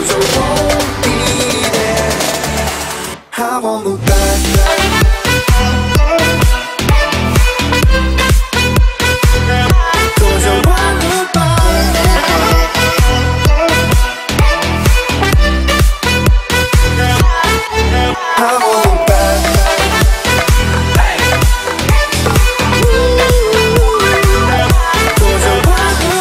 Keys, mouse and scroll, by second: 0.0-1.4 typing, 2.2 click, 3.1-4.6 typing, 3.7 Return, 5.2 click, 5.7 space, 6.4 scroll up 1, 6.7 t, 7.1 click, 8.0 Right, 8.3-9.5 scroll down 1, 9.5 click, 9.6 space, 10.6-10.9 scroll up 1, 10.9 t, 11.5-12.1 scroll down 1, 12.1-12.5 scroll up 1, 12.5 click, 13.9 9, 14.3 shift+', 14.5 Return, 15.2 click, 16.3-16.7 typing, 17.0 Return, 18.2 space, 18.8 click, 19.9-20.2 scroll up 1, 20.2 m, 21.1 ctrl+click, 22.1 space, 24.2 click, 25.7 m.